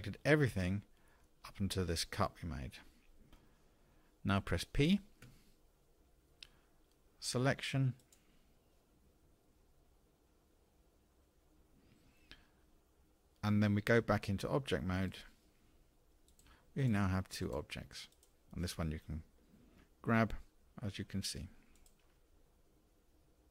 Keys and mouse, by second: 5.3 p, 15.4 Tab, 18.2 click, 20.1 g.